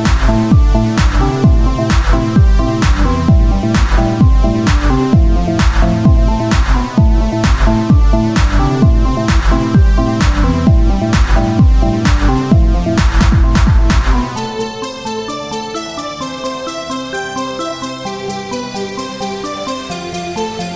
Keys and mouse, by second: 0.7 z, 3.0 Tab, 3.5 z, 4.3 KP_1, 5.4 click, 6.9 click, 7.1 z, 8.4 r, 9.2 z, 10.7-20.7 drag.